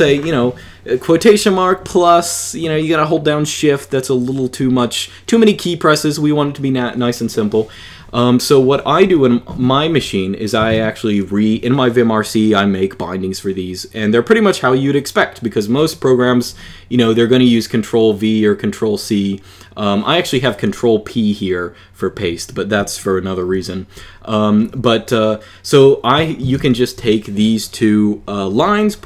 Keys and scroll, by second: 8.8 n, 10.1-11.0 typing, 23.3 j, 23.6 j, 24.4 k, 26.0-26.8 typing.